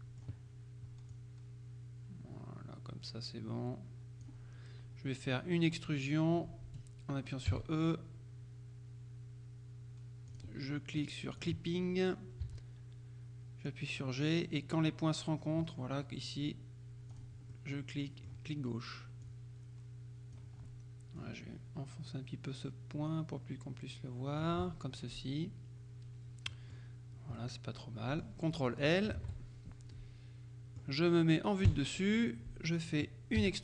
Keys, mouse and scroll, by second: 1.2-4.8 drag, 7.6 e, 10.4 click, 11.5 click, 12.5 g, 17.2 click, 19.3-21.0 drag, 21.2-25.0 drag, 27.4-28.8 middle drag, 29.2 ctrl+l, 30.0-31.4 middle drag, 31.8 KP_7, 33.4 e.